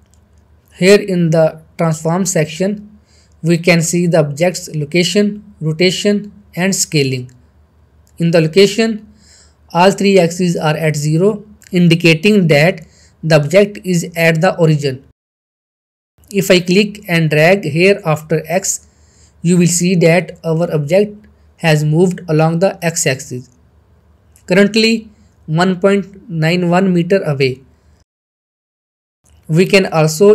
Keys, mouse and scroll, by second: 0.2-0.8 middle drag, 9.7 middle click, 13.8-15.1 shift+middle click, 18.3 click, 18.4-20.2 drag, 20.3-21.2 middle click, 27.6 shift+middle click, 28.9 click.